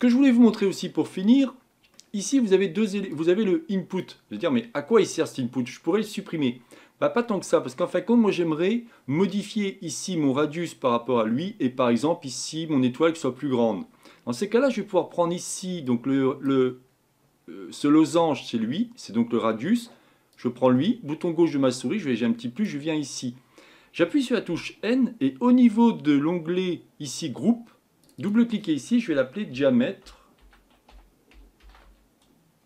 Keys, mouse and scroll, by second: 22.6 click, 24.5 n.